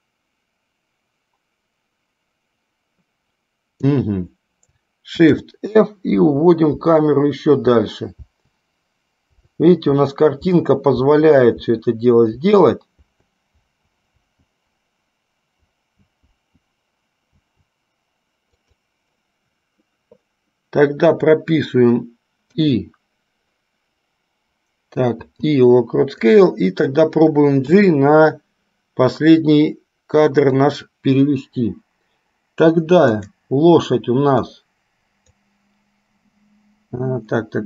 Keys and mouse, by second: 26.3 click, 33.2 click, 34.7 click.